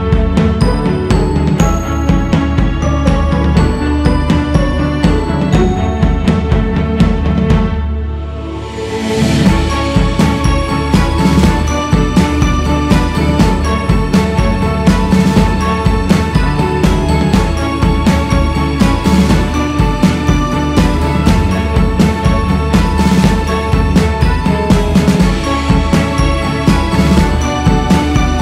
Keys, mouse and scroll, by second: 0.7-1.4 scroll down 3, 1.4-1.8 scroll up 3, 1.8 ctrl+z, 2.3 ctrl+scroll up 1, 2.4 ctrl+z, 3.0-4.2 scroll up 1, 4.2-6.2 drag, 6.2 shift+s, 6.5 f, 7.5-11.8 drag, 11.8 c, 12.8-14.0 drag, 14.0 ctrl+z, 14.8 shift+c, 15.2 f, 16.8-18.4 drag, 18.4-19.5 scroll down 2, 19.5-20.7 scroll down 8, 20.7-22.4 scroll up 7, 22.4 ctrl+z, 22.7 ctrl+z, 23.1 ctrl+z, 23.6 ctrl+z, 25.3-26.0 scroll up 2, 26.5 shift+c, 26.8 scroll up 2, 27.5-28.4 drag.